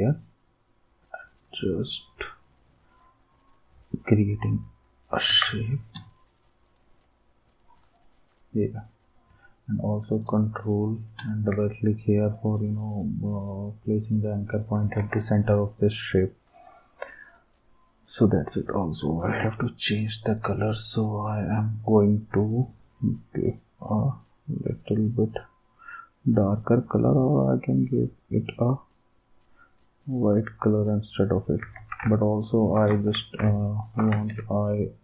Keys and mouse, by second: 5.3 ctrl+s, 15.0 ctrl+s, 19.4 v, 31.6 ctrl+s, 32.9 ctrl+s, 34.1 ctrl+s.